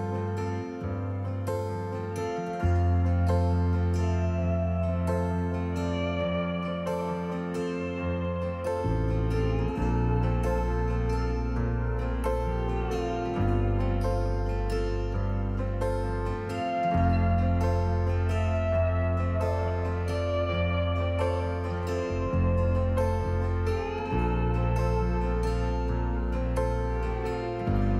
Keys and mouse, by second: 0.7 alt+g, 2.9 alt+g, 4.7 click, 5.3-6.6 drag, 6.6-6.9 middle drag, 6.9 click, 7.9-9.7 middle drag, 10.2 Tab, 10.7 click, 12.4-15.9 alt+s, 15.9 alt+click, 16.0 alt+s, 16.1 alt+s, 16.2 alt+s, 17.0 click, 18.6-21.4 alt+s, 21.1 alt+click, 24.1 Tab, 24.6 s.